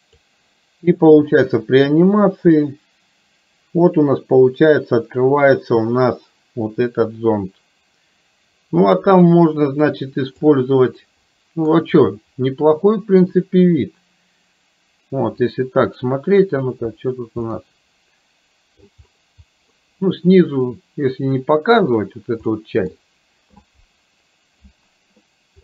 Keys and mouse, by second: 0.1 click, 1.6-16.3 drag, 17.6-18.9 middle drag, 19.9-21.9 middle drag, 22.6 middle drag.